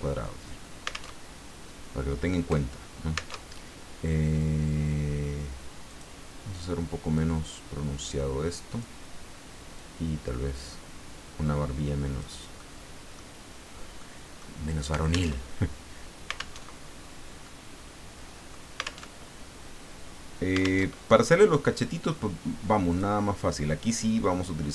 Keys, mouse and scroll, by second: 1.1 alt+Tab, 3.3 alt+Tab, 5.9 click, 7.1-8.9 drag, 9.7-12.5 drag, 12.6 click, 12.8 middle click, 13.0 click, 14.0 click, 15.3 alt+Tab, 16.6 alt+Tab, 17.4-18.7 drag, 19.0 alt+Tab, 20.8 alt+Tab, 22.9 click.